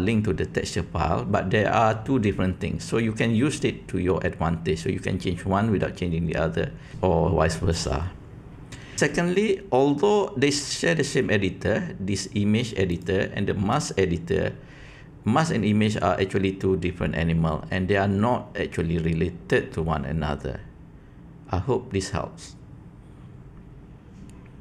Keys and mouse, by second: 12.8-13.7 drag.